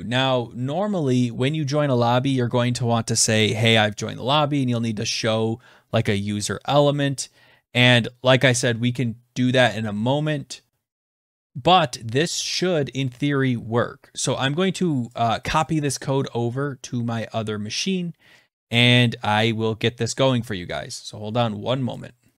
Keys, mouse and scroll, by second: 12.0 ctrl+s, 21.6 click.